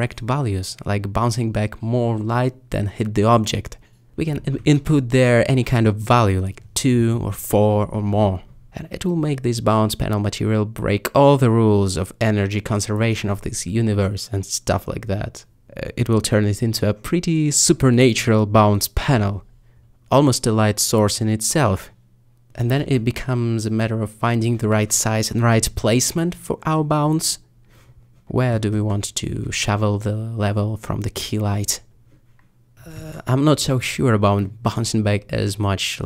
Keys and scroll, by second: 5.2 2, 8.5 4, 20.2 ., 21.8 r, 21.9 z.